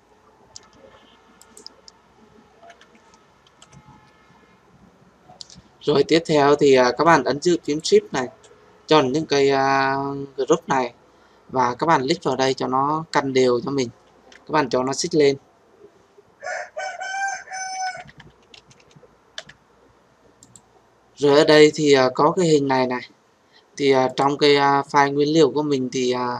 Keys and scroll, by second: 2.9 ctrl+g.